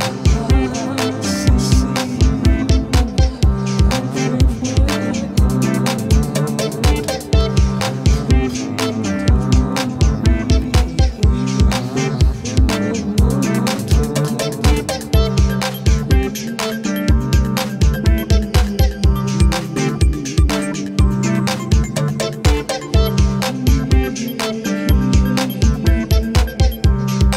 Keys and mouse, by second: 0.7 ctrl+=, 1.6 space, 3.5 space, 5.6 space, 5.8 ctrl+=, 6.5 space, 9.2 double click, 11.1 space, 12.8 space, 20.5 space, 22.5 space, 23.1 double click.